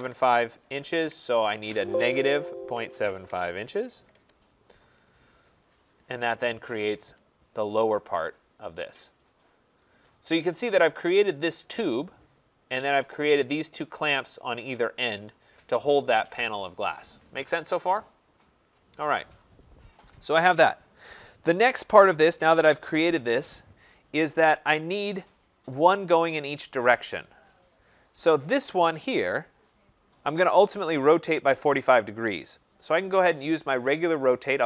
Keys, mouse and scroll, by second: 0.0-3.7 typing, 7.9-9.3 middle drag, 7.9-8.7 scroll, 9.3 Return, 9.3 click, 9.7 right click, 10.2-12.9 scroll, 13.3 click, 13.8 click, 14.8 click, 15.4 click, 24.3-27.5 scroll, 27.5-28.2 scroll, 28.2 scroll, 28.3 click, 29.6 click, 33.4-34.6 drag.